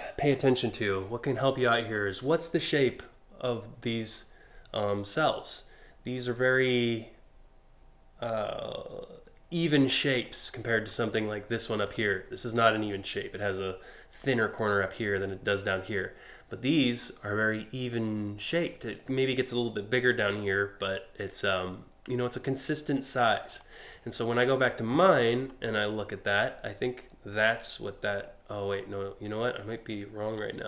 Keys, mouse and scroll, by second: 10.1 scroll up 1, 10.5 scroll down 1, 23.1 click, 24.7 scroll up 1.